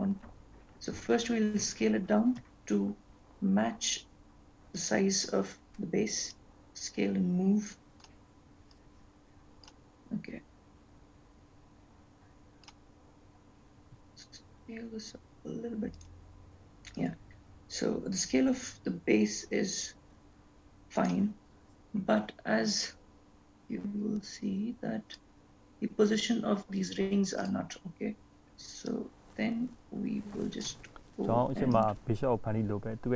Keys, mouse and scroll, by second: 1.1-1.8 scroll up 2, 4.2 s, 6.6 click, 9.2 click, 10.9 click, 17.0 click, 25.3 click, 27.5 click, 29.2 click, 31.9 click.